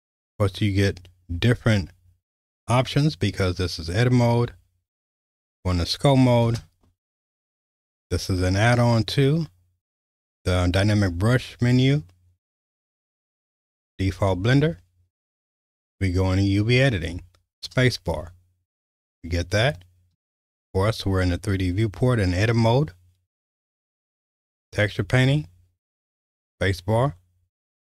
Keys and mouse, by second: 5.2 click, 6.5 space, 17.6 space, 20.1 space, 24.7 click, 26.0 space.